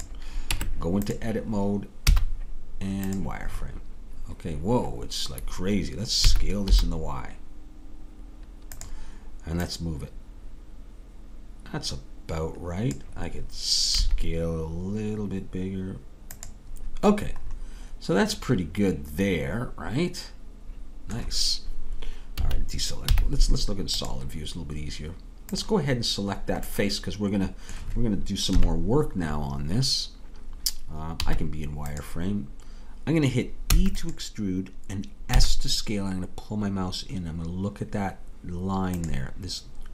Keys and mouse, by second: 0.5 Tab, 2.1 z, 6.3 s, 9.7-12.9 drag, 14.0 s, 17.6 middle click, 18.9-20.3 middle drag, 22.4 a, 24.0 z, 25.7-28.5 drag, 28.5 KP_3, 31.0 middle click, 31.3 z, 33.8 e, 35.4 s.